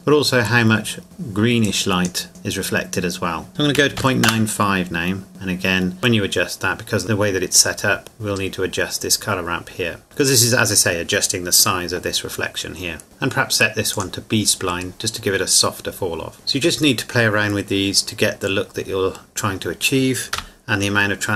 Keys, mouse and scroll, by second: 3.5 KP_Decimal, 3.8 KP_9, 4.0 KP_5, 4.2 KP_Enter, 5.3 click, 13.0 click, 17.2 middle click, 20.4 KP_0.